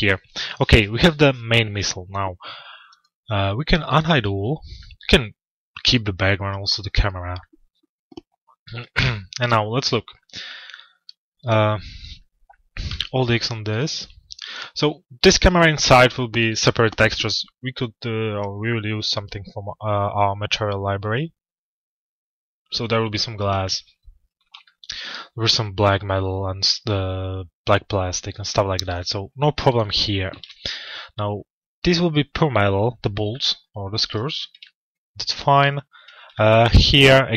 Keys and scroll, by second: 12.5 alt+x, 29.9 alt+x.